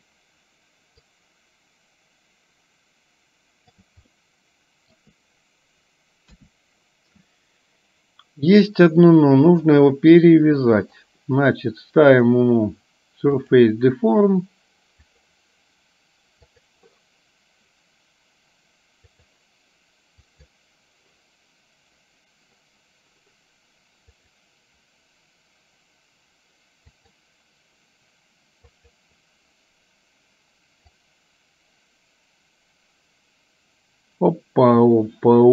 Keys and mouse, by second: 1.3-3.9 drag, 4.3 middle click, 6.4 KP_1, 9.7 click, 10.9-13.8 drag, 15.2 click, 19.2 click, 24.3-27.3 drag, 28.9 click, 31.0-35.5 drag.